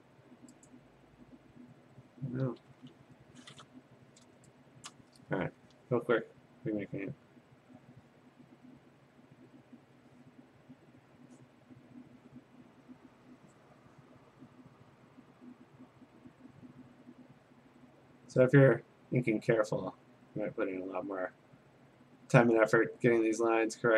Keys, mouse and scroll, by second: 0.2-0.7 scroll, 0.7 click, 3.1 p, 4.9 click, 7.1 click, 8.0 click, 10.0 click, 11.4 click, 12.7 click, 15.7 click, 17.0 click, 18.8 click, 19.7 click, 21.0 click, 21.9 click, 23.1 click, 23.6 click.